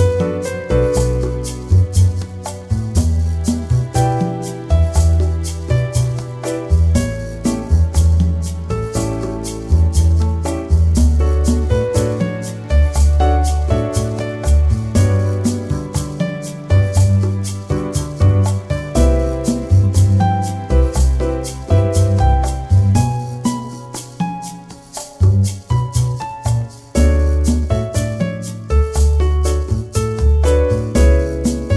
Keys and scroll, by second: 0.3 space, 2.3 ctrl+=, 3.7 ctrl+-.